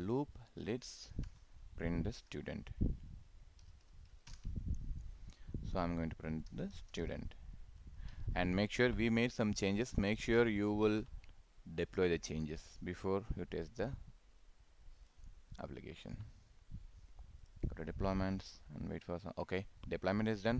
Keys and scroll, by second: 4.3 ctrl+Return, 7.8 ctrl+s.